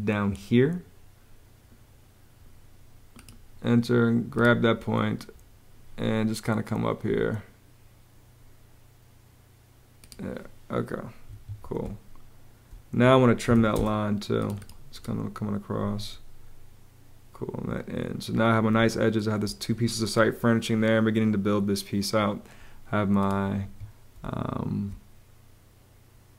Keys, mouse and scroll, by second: 11.0 Escape, 11.5-13.8 typing, 15.5 Escape, 18.5 space, 23.3 Escape, 23.9 space.